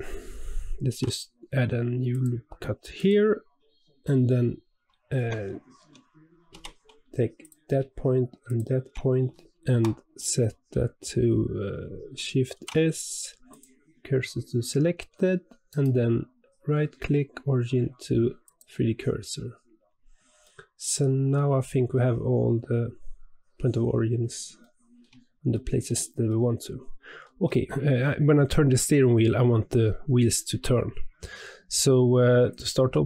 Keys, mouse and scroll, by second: 0.8 ctrl+r, 5.1 Tab, 5.7 Tab, 6.5 1, 7.4 click, 8.4 shift+click, 12.5 shift+s, 14.9 Tab, 15.6-19.9 right drag, 19.9-20.4 scroll down 1, 20.4-21.5 middle drag, 21.5-21.9 scroll down 2, 21.9-24.0 middle drag, 24.0-24.6 scroll up 2, 24.6-27.6 shift+middle drag.